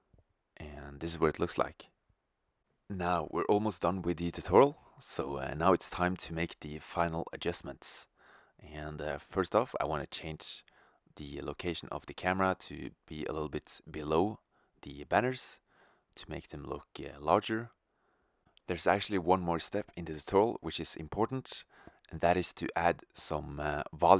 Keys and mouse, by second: 2.4 shift+z, 2.8 click, 3.1 shift+f, 4.5 shift+z, 5.7 shift+f, 6.4 shift+z, 6.7 shift+z, 6.9 shift+f, 9.0 shift+z, 9.4 shift+z, 9.6 shift+f, 10.2 shift+z, 14.5 click, 16.4 middle click, 16.4-17.0 drag, 16.4 shift+z, 17.0 middle click, 17.3 drag, 17.4 middle click, 17.6 click, 17.7 middle click, 17.7 KP_0, 18.3 click, 19.0 middle click, 19.2 shift+z, 21.2 middle click, 22.9 shift+z, 23.4 click.